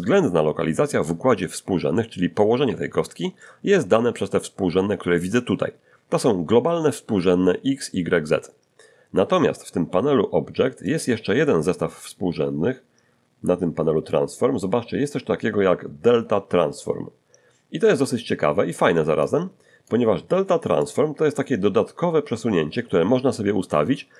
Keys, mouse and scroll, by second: 0.0-1.2 middle drag, 3.4 shift+middle click, 10.8 click, 12.7-13.0 scroll down 1, 13.3 scroll up 1, 14.2-15.2 scroll down 2, 19.2 click, 20.8 click, 21.2-21.9 scroll down 2.